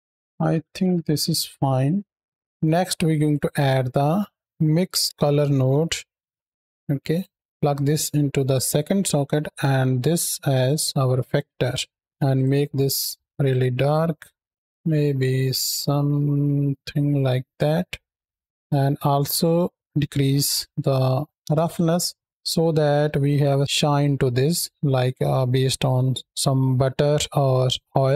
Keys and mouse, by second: 2.4 ctrl+x, 3.0 shift+a, 7.0 click, 7.5-8.3 drag, 8.9-10.5 drag, 12.0 click, 17.9 middle click, 18.4-21.3 drag, 22.5 shift+middle drag, 23.0-23.7 middle drag.